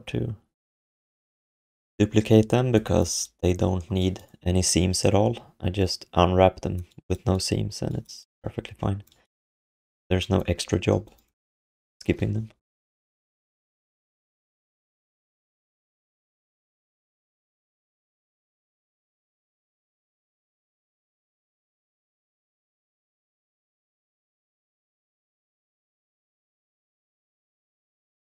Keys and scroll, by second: 2.5 alt+q, 8.5 alt+q, 9.8 ctrl+s, 22.5 alt+q, 23.8 alt+q, 26.5 alt+shift+d, 26.8 ctrl+s, 27.7-28.2 typing.